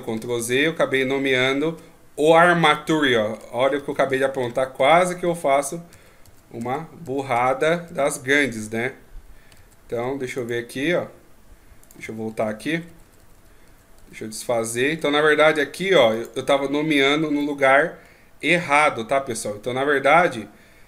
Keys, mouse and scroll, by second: 0.4 ctrl+z, 0.7 ctrl+z, 0.9 ctrl+z, 1.3 ctrl+z, 3.4 ctrl+z, 3.8 ctrl+z, 4.1 ctrl+z, 4.4 ctrl+z, 4.8 ctrl+z, 5.2 ctrl+z, 5.9 ctrl+z, 6.2 ctrl+z, 6.6 ctrl+z, 7.3 ctrl+z, 7.6 ctrl+z, 7.9 ctrl+z, 8.2 ctrl+z, 9.6 ctrl+z, 10.4 right click, 11.8 right click, 12.0 ctrl+z, 12.3 ctrl+z, 12.5 ctrl+z, 12.7 ctrl+z, 12.9 ctrl+z, 13.1 ctrl+z, 13.2 ctrl+z, 13.3 ctrl+z, 13.7 ctrl+z, 14.0 ctrl+z, 14.4 middle click, 16.2 click, 17.4 middle click, 18.0-19.3 scroll up 4.